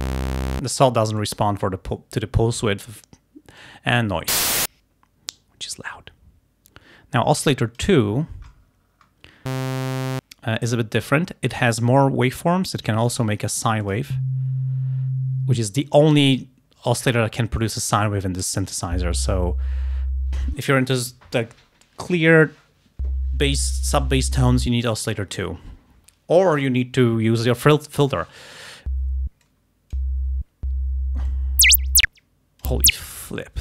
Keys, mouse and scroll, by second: 1.3-3.8 drag, 7.5 click, 8.6-9.3 scroll up 1, 9.3 scroll down 1, 11.5 click, 13.9 click, 29.5 click, 31.3-32.8 drag.